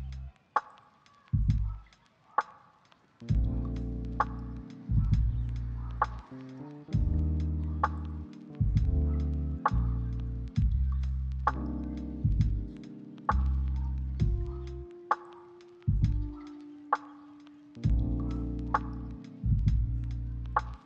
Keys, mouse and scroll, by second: 1.4 middle click, 1.8 shift+middle click, 1.9 shift+scroll up 2, 2.1 middle click, 2.3 scroll down 1, 2.4 shift+middle click, 4.3-6.5 typing, 6.3 ctrl+click, 7.7 g, 10.8-11.2 scroll up 3, 11.0 shift+middle click, 11.4 shift+middle click, 11.4 shift+scroll down 2, 11.8 middle click, 13.7 a, 14.0 scroll down 1, 14.2 g, 17.2 middle click, 17.5 scroll down 1, 17.7-18.2 scroll up 1, 18.2 g, 19.8 scroll down 1, 20.6 middle click.